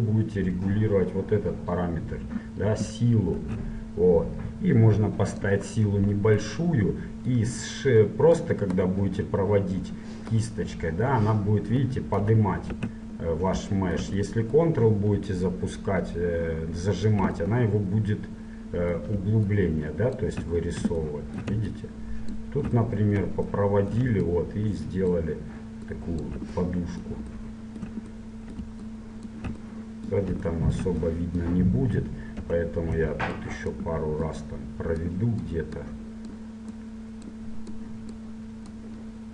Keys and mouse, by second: 3.6 shift+f, 5.5-7.1 drag, 7.1 middle click, 7.2 click, 8.5-10.5 drag, 12.9 ctrl+z, 15.4-17.2 drag, 17.6-19.7 middle drag, 19.7-21.4 drag, 21.9-23.7 drag, 24.4-27.8 drag, 29.0-30.8 drag, 30.8-33.5 middle drag, 32.5 KP_7, 33.5-39.3 drag.